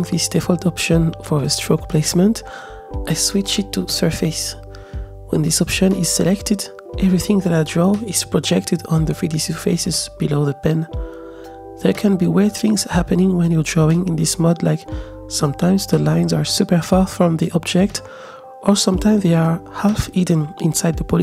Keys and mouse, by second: 1.4-5.5 drag, 9.2 click, 9.7 click, 10.9 z, 11.2 z, 12.4-14.1 ctrl+drag, 14.8 ctrl+z, 15.0 click, 15.5-17.1 middle drag, 17.4-21.2 drag, 20.5 shift+KP_0.